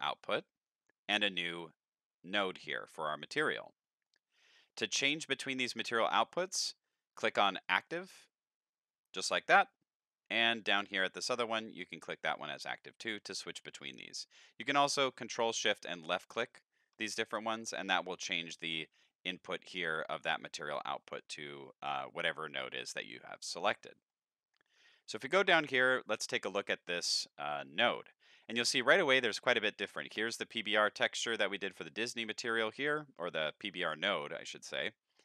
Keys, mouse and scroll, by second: 4.1 middle click, 4.7-5.4 scroll up 2, 7.6 click, 8.7 click, 11.2 click, 15.6 ctrl+shift+click, 17.1 ctrl+shift+click, 24.1 middle click, 24.8-25.5 scroll up 7, 25.5 middle click, 29.0 middle click, 32.6 middle click, 34.9 middle click.